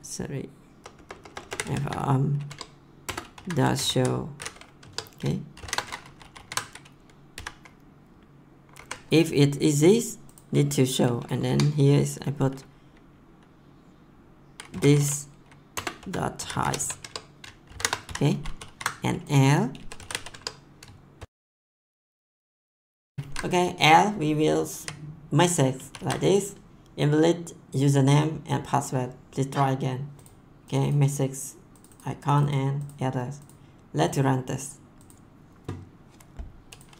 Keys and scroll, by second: 1.2-4.3 typing, 3.0 Return, 4.8 Tab, 5.5 shift+9, 6.0 ctrl+s, 7.3 ;, 8.8 Up, 11.4 Return, 14.4-21.1 typing, 15.7 Return, 21.4 Return, 21.7 ctrl+s, 24.8 ctrl+v, 26.7 ctrl+s.